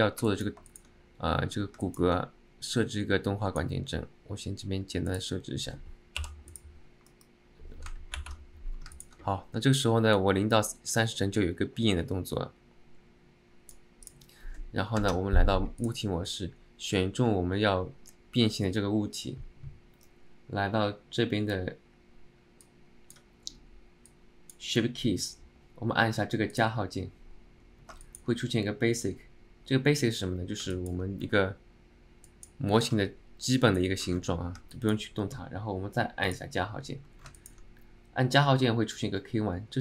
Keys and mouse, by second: 0.4 middle click, 0.8 middle click, 1.9 alt+middle click, 2.8 click, 5.3 click, 9.1 middle click, 10.4-14.0 drag, 15.2 ctrl+Tab, 15.9 click, 22.7 click, 24.3 click, 26.6 click, 28.1 shift+middle drag, 30.8 alt+middle drag, 32.5 click, 34.9 alt+middle click, 36.5 click, 37.5 shift+middle click.